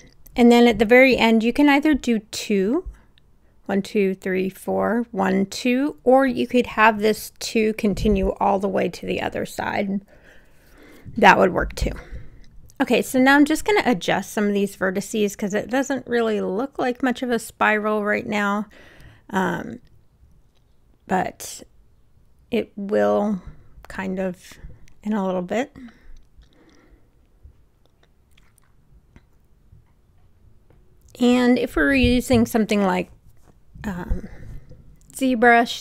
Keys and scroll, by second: 13.7 w, 27.2 Caps_Lock.